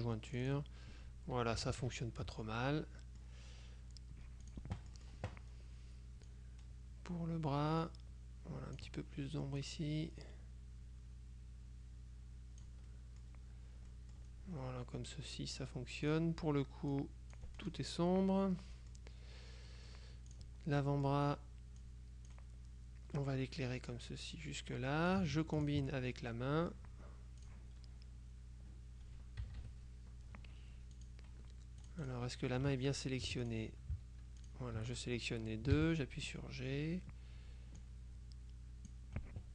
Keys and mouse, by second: 0.4 click, 1.7 KP_Subtract, 2.7-3.8 drag, 4.5-5.6 drag, 4.9 right click, 6.4-9.3 drag, 9.7-13.2 drag, 14.0 middle click, 16.2 click, 17.0 click, 18.6 middle click, 19.3 click, 19.8-20.9 drag, 21.9-22.9 drag, 25.0 click, 27.5 click, 29.5 KP_Subtract, 31.1 click, 31.9-33.2 drag, 33.3 F2, 33.5 click, 34.5 shift+click, 35.9 g, 37.9-39.5 drag.